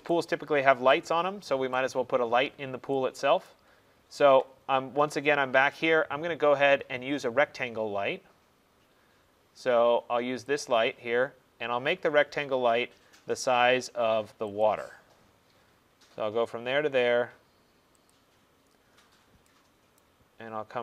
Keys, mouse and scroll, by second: 0.2 right click, 0.5 middle click, 0.6 middle click, 1.8 right click, 2.6 middle click, 2.6 middle click, 3.6 right click, 3.9 middle click, 3.9 middle click, 4.2 middle click, 8.6 scroll, 10.7 click, 11.6-12.4 scroll, 14.7 click, 14.9-15.7 scroll, 15.7-17.0 scroll, 17.0 middle click, 18.2 click, 18.4 middle click, 18.5 middle click, 19.2 middle click, 19.3 middle click, 20.1 right click, 20.4 middle click, 20.5 middle click.